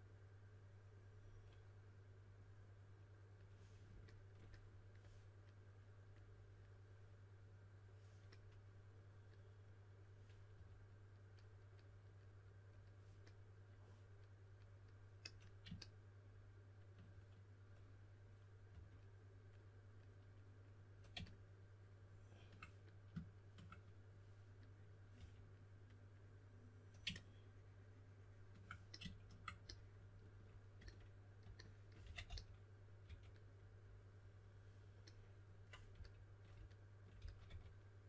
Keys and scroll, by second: 10.5 3, 18.6 3, 25.1 3, 31.7-33.0 typing, 35.9 typing, 37.1 typing.